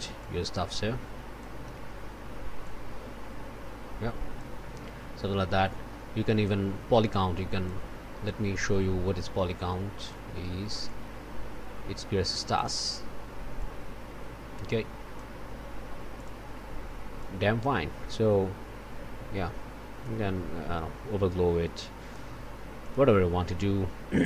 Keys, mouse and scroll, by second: 0.2-1.6 drag, 2.6-4.6 drag, 6.4-7.8 drag, 8.2-10.3 drag, 10.8-12.8 drag, 13.6-15.4 drag, 16.1 click, 17.2-22.3 drag, 22.8 click.